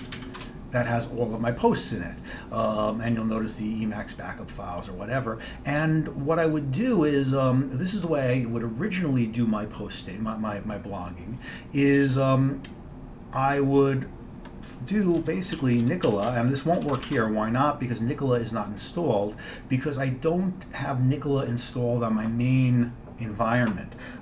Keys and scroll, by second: 0.0-0.7 typing, 15.0-17.8 typing.